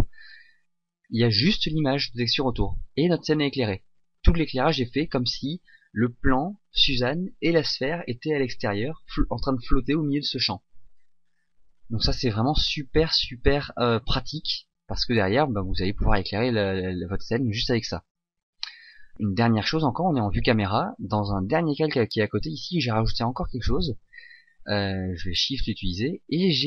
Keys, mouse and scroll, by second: 25.6 click.